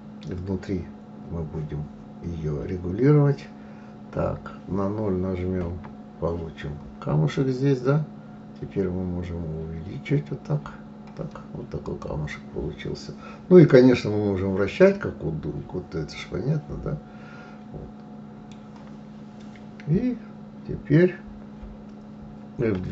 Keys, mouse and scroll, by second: 5.4 KP_0, 8.2-9.6 scroll up 3, 10.0-10.3 scroll down 1, 10.7-12.0 scroll up 1, 12.0 click, 13.8-16.7 middle drag.